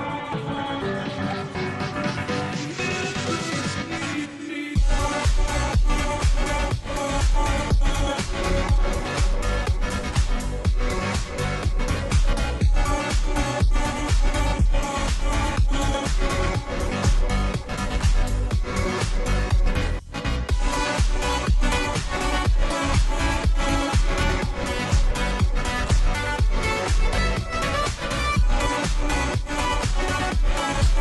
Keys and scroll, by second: 10.5 ctrl+j, 11.4 space, 11.9 space, 12.3 ctrl+t, 16.8 Return, 21.6 ctrl+t, 28.1 shift+Return.